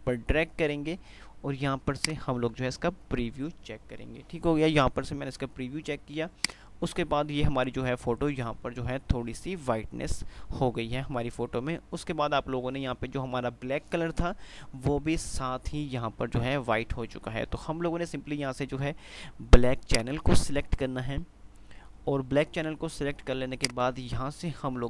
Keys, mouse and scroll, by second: 6.5 click, 20.0 click, 23.8-24.8 drag.